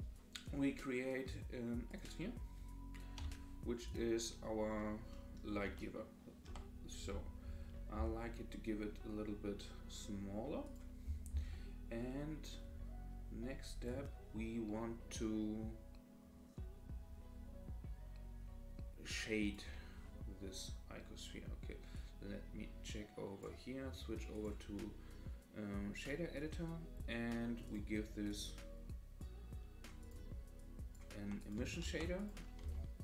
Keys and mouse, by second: 3.2 g, 5.1 middle click, 5.3 click, 5.9-6.4 middle drag, 7.9 s, 14.0-19.5 drag, 22.1-23.5 drag, 24.3-26.1 drag, 28.3 click, 29.2 click, 30.0 click, 30.6-30.9 drag, 31.4 click, 31.8 shift+a.